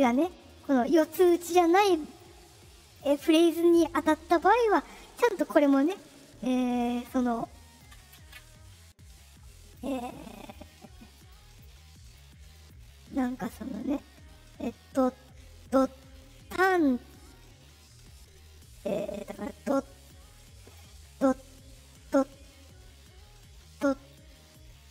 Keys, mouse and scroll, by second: 2.1 click, 3.3 right click, 4.7-5.8 drag, 6.7-7.7 drag, 8.2 ctrl+z, 11.2 shift+click, 12.0 right click, 12.5 right click, 13.0 right click, 19.1 right click, 19.4 right click, 20.0 click, 24.0 click.